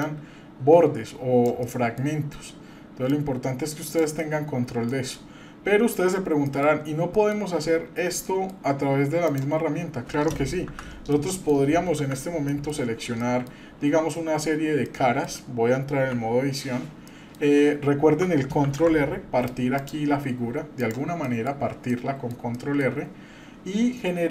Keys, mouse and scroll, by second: 0.0-1.5 drag, 1.6-2.0 middle drag, 3.1-4.0 drag, 4.2-4.9 middle drag, 5.2-6.2 middle drag, 6.2-6.5 scroll down 1, 6.5 middle click, 7.1 middle click, 8.2 middle drag, 9.2 click, 10.5 KP_Divide, 11.1-11.5 middle drag, 11.9 KP_Divide, 12.5 middle drag, 12.9-13.2 scroll up 2, 13.2 middle click, 14.9 middle click, 16.0 Tab, 16.0 \, 17.1 middle click, 18.6 ctrl+r, 21.2 middle click, 21.9 middle click, 22.5 shift+middle click.